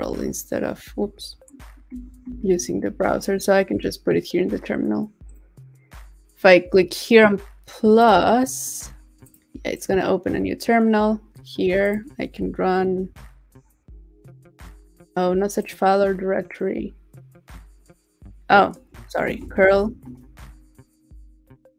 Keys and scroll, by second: 0.0 super+c, 0.8 super+a, 1.5 super+c, 2.3 super+w, 12.4 super+v, 19.7 super+v.